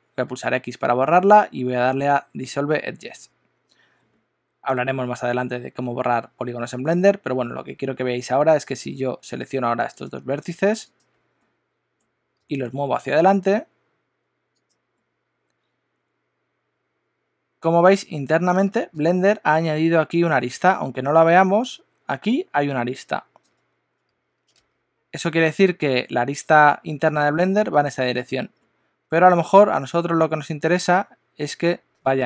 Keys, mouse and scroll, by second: 0.3 x, 8.9 1, 9.9 click, 10.9 shift+click, 11.4 middle click, 12.3 g, 15.0 middle click, 28.5 middle click.